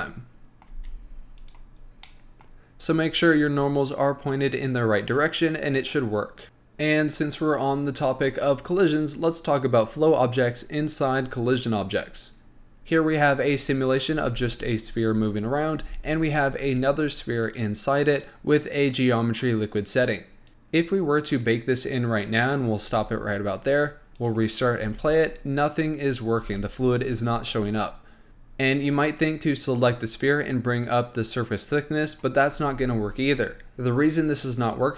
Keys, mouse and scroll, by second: 0.9 space, 1.6-2.3 drag, 2.3-5.3 middle drag, 6.4 click, 14.4 space, 16.1 space, 16.9 click, 18.4 click, 20.5 click, 21.7-25.1 drag, 25.1 space, 26.7 space, 28.3 click, 29.1 click.